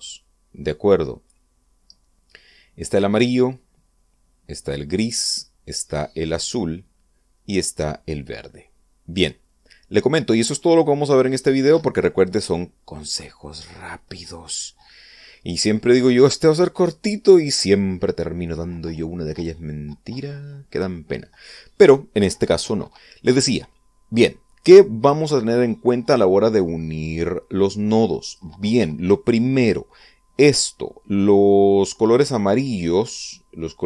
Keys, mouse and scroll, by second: 11.1-12.8 drag, 27.4-29.1 drag, 32.8-33.8 drag.